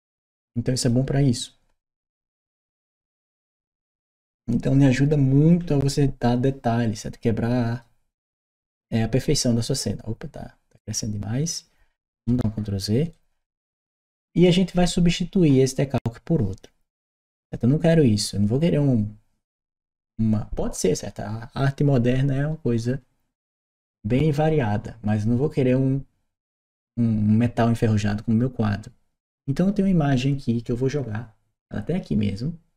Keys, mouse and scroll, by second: 0.6 click, 3.6-9.5 drag, 12.3 ctrl+z, 12.9 ctrl+right click, 13.5 ctrl+right click.